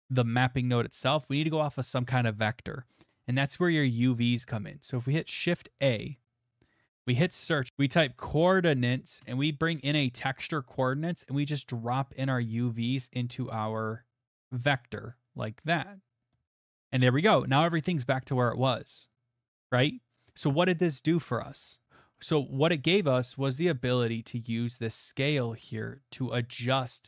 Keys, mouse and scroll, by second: 5.5 a, 7.3 click, 7.7-8.4 typing, 9.2 Return, 10.6 click, 16.9 middle click, 17.5 middle click, 18.6 middle click, 21.8 middle click, 22.2 middle click, 22.2 middle click, 22.2 middle click, 23.3 middle click, 23.3 middle click, 23.5 middle click, 23.5 middle click, 23.6 middle click, 24.1 middle click, 25.7 middle click, 25.9 middle click.